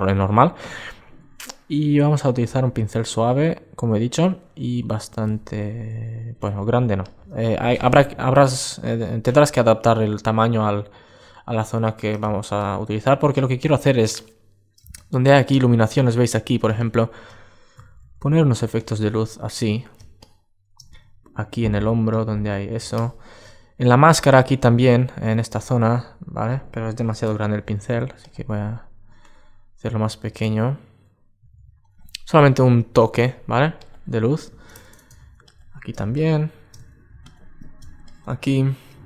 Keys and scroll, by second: 23.3 super+space, 26.7 super+z, 29.9 super+z, 34.8 super+z.